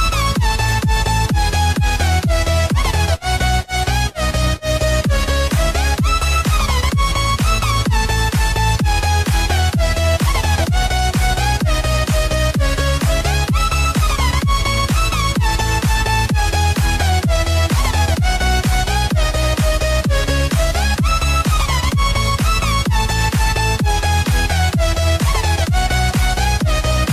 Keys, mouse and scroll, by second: 19.2 click, 21.9 click.